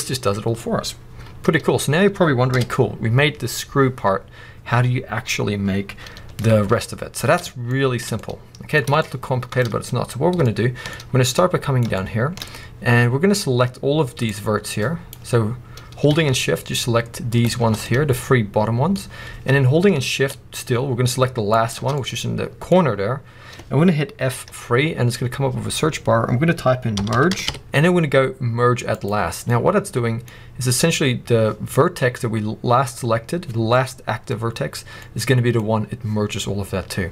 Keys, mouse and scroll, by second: 2.4 KP_1, 7.6-8.3 shift+middle drag, 8.9 shift+middle click, 9.5 shift+middle click, 9.6 scroll up 1, 10.3 shift+middle click, 11.2 middle click, 11.8-13.3 shift+scroll up 2, 14.1 click, 17.2 shift+click, 17.8 middle click, 21.4 shift+click, 21.9 middle click, 24.3 F3, 29.4 middle click, 35.2-37.0 middle drag, 37.0 scroll down 1.